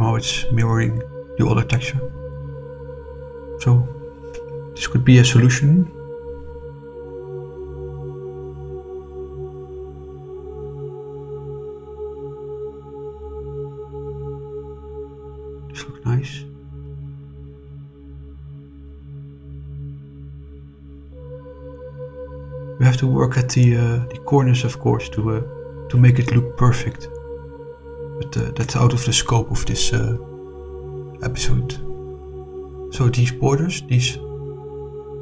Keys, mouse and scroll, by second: 2.9 scroll down 2, 3.2-5.8 middle drag, 6.1-7.4 middle drag, 8.5 click, 9.1 click, 9.8 click, 10.5 shift+click, 11.9 click, 12.5 click, 13.0-15.8 middle drag, 16.1 click, 17.2 click, 17.7 click, 19.2 middle click, 20.0 scroll up 2, 21.3 scroll up 2, 21.7-23.3 middle drag, 23.7 scroll down 2, 23.9 middle click, 24.6-25.1 scroll down 2, 25.3-26.4 middle drag, 26.5-26.9 scroll down 2, 27.1 middle click, 27.9 middle click, 28.9 click, 29.7 shift+click, 30.3 middle click, 31.8 shift+click, 32.6 shift+click, 33.7 click, 34.4 click.